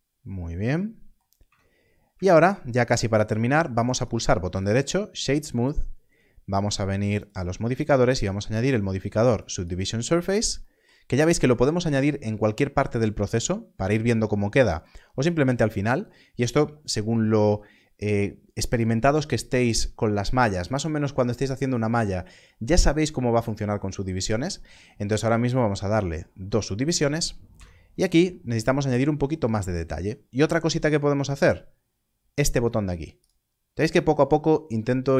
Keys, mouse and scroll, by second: 1.6-2.0 scroll, 7.1 click, 27.4 Tab.